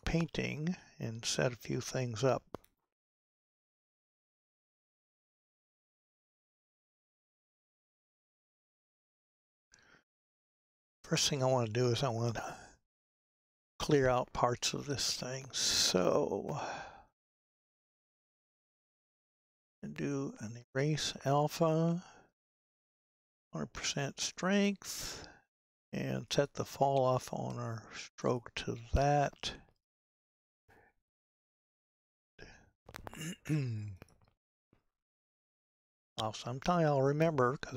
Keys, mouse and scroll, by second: 0.0 click, 5.7 n, 21.5-37.7 drag.